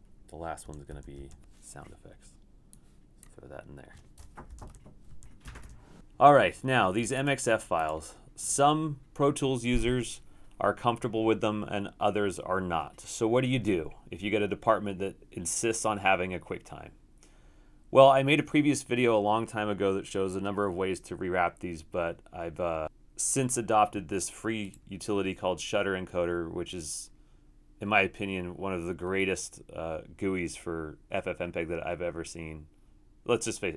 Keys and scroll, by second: 0.6 Right, 0.9 Down, 1.2 Down, 4.7 Return, 5.1 Right, 5.4 BackSpace, 5.6 BackSpace.